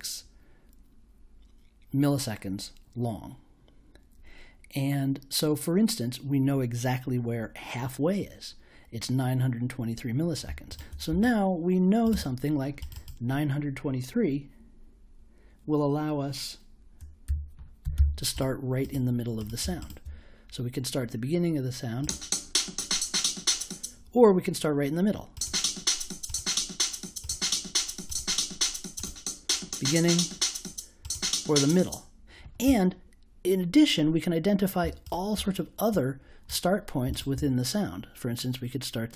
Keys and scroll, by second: 17.2-18.4 typing.